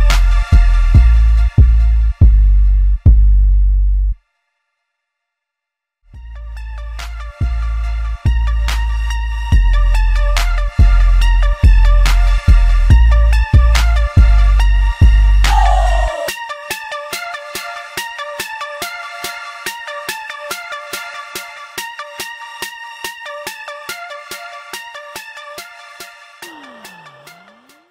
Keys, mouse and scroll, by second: 1.6 q, 15.7 shift+middle click, 16.4 click, 17.1 shift+click, 17.5 q, 19.1 click, 19.7 shift+click, 20.1 q, 21.2 click, 21.5 q, 22.7 z, 23.5-27.9 ctrl+middle drag.